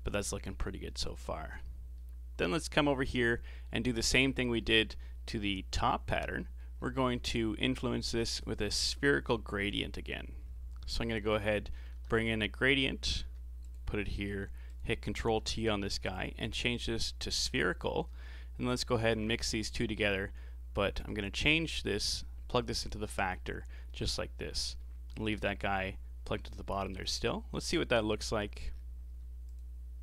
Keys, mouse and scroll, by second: 3.9-4.6 scroll down 9, 4.6-6.8 middle drag, 6.8-7.1 scroll down 3, 7.1 middle click, 7.8 click, 9.3 g, 10.4-10.8 scroll up 3, 10.9 shift+a, 14.0-14.5 scroll up 7, 14.7 click, 15.3 ctrl+t, 16.1-18.7 drag, 18.7-19.6 ctrl+shift+right drag, 19.6-20.0 middle drag, 20.0-20.8 scroll up 5, 21.0 click, 22.1-23.9 drag, 23.9-28.4 middle drag, 28.4-29.5 scroll down 9, 29.5 ctrl+shift+click.